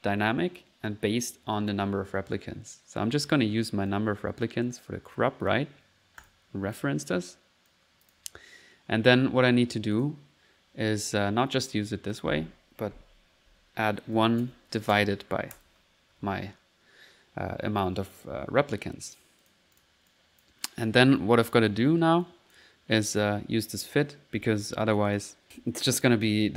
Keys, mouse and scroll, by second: 3.9-5.6 drag, 5.7 click, 6.8 click, 7.7 click, 12.1 click, 12.4 click, 19.4-20.7 drag, 21.5 click, 22.2 click, 23.0 click, 23.4 typing, 23.7 click, 24.7 middle click, 25.0 click, 26.4 click.